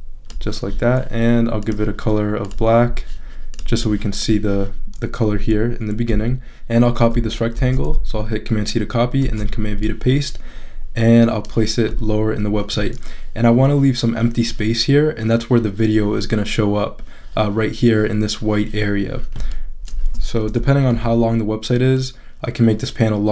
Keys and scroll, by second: 7.5 super+c, 9.2 super+v, 20.4 super+-.